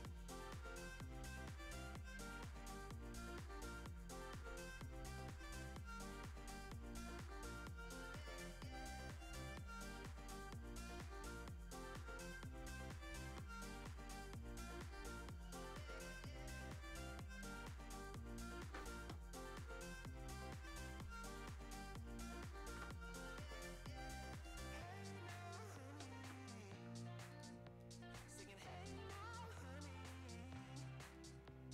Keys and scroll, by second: 30.6 Escape.